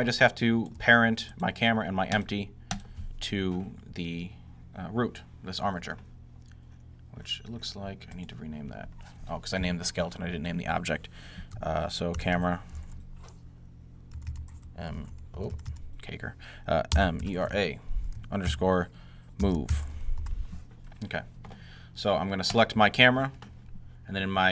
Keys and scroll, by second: 11.8-20.2 typing, 22.9 typing.